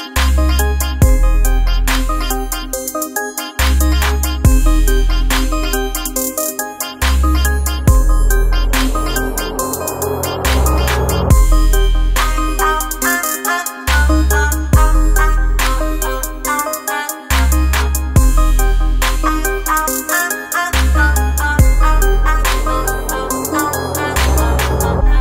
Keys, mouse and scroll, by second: 3.0 typing, 7.5-13.7 drag, 13.7 right click, 15.0 click, 17.2 ctrl+space, 17.5 ctrl+click, 17.8 ctrl+space, 20.6-24.7 drag, 24.7-25.2 drag.